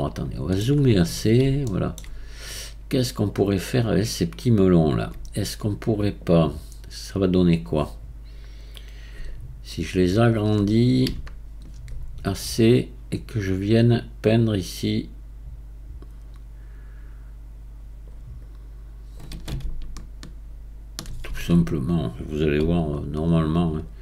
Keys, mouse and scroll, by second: 1.0-1.6 scroll up 4, 1.7-2.5 shift+middle drag, 2.5-15.8 right drag, 18.4-24.0 right drag.